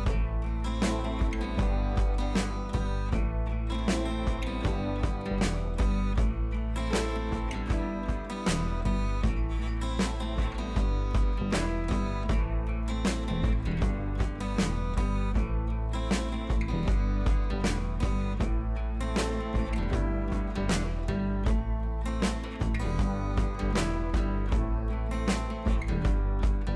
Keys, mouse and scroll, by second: 2.4 ctrl+z, 3.2 click, 3.9 ctrl+z, 4.2 click, 4.8 click, 5.2 ctrl+z, 5.5 click, 5.8 ctrl+z, 6.2 click, 9.1 click, 9.5 ctrl+z, 9.8 click, 11.4 ctrl+z, 11.8-12.8 drag, 13.2-13.7 scroll up 1, 13.7 click, 14.3 Up, 15.0 click, 15.8 shift+click, 17.4 Up, 24.3 click, 26.6 click.